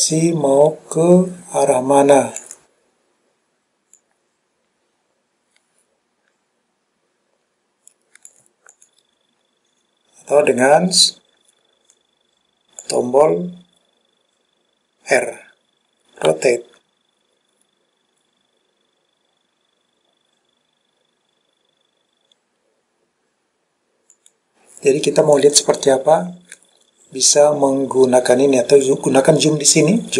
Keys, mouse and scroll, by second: 0.0 click, 0.4 click, 4.1 click, 8.8 click, 12.9 click, 16.4 r, 24.2 click, 29.0-30.1 drag.